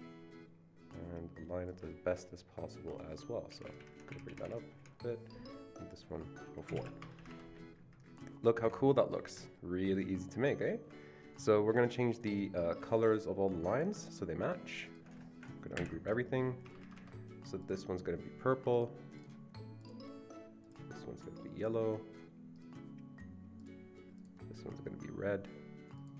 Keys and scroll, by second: 3.5 Up, 3.6 Up, 3.9 Up, 4.1 Up, 4.2 Up, 4.4 Up, 4.8 Up, 6.7 typing, 7.0 Escape, 7.3 Escape, 15.7 ctrl+shift+g, 16.6 Escape, 16.8 Escape.